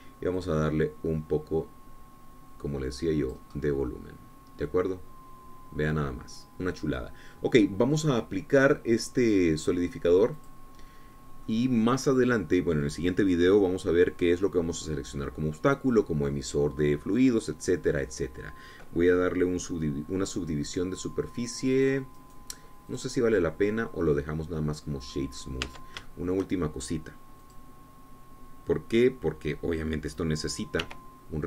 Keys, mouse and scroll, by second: 0.6 click, 2.0-5.1 drag, 5.2-10.1 middle drag, 7.0-10.1 drag, 12.0 click, 13.0-14.6 middle drag, 23.8 click, 25.0-26.9 middle drag, 27.3 Tab, 27.6 shift+click, 29.2 click.